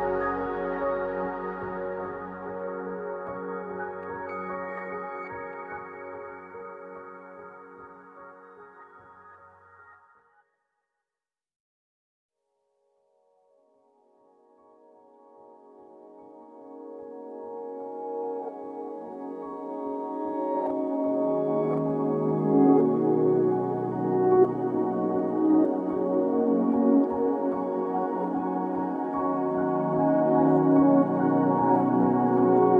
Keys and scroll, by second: 0.5 ctrl+s, 1.4-2.3 typing, 7.2-8.1 typing, 8.2 Escape, 18.7-21.0 typing, 22.5-23.4 typing, 24.6 BackSpace, 25.9-27.6 typing, 25.9 Return, 26.7 Escape, 28.9 BackSpace, 29.1 BackSpace, 29.7 ctrl+s, 32.3 ctrl+c.